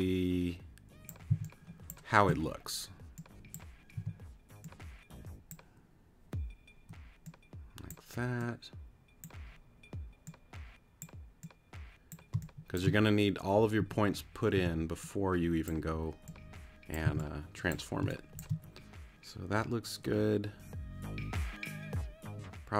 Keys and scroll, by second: 1.3 c, 3.9 t, 12.3 space, 13.8 a, 14.5 t, 17.0 c, 18.0 space.